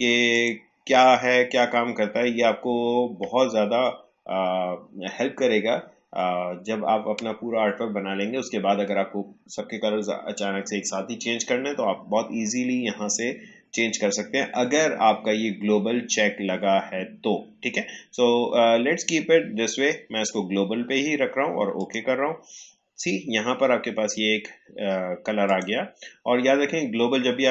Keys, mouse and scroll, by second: 25.4 click.